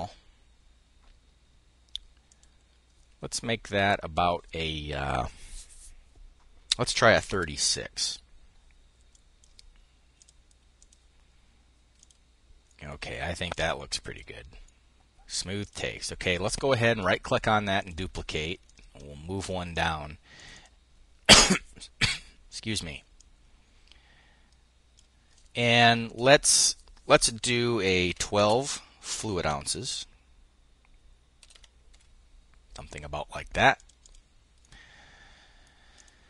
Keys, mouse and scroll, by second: 1.8 click, 3.3 click, 6.5-7.4 typing, 8.7 click, 9.0-10.2 drag, 10.4 middle click, 11.6 middle click, 12.3 click, 14.3 click, 15.2 middle click, 16.1 middle click, 16.1 click, 17.4 click, 18.2-19.8 ctrl+drag, 19.9 click, 22.7-24.9 drag, 27.4-32.0 typing, 33.3-34.7 drag, 35.5 click.